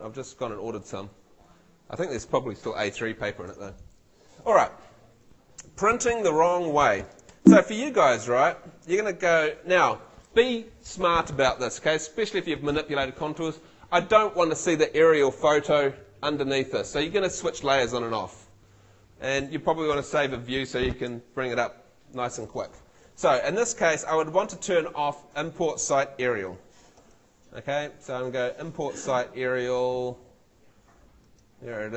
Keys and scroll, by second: 7.3 F2, 26.3 Escape, 27.0 super+l.